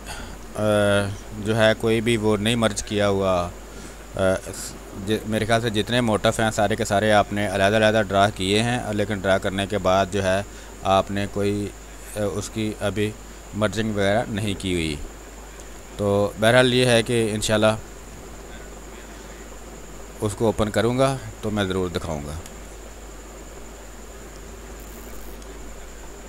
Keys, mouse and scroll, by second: 4.3 ctrl+d, 5.5-11.5 drag, 13.5 shift+space, 15.5 click, 15.7 space, 16.0 alt+click, 18.1 ctrl+d, 18.2 w, 19.5-24.6 drag, 24.6 ctrl+d, 25.9 space, 26.1 ctrl+click.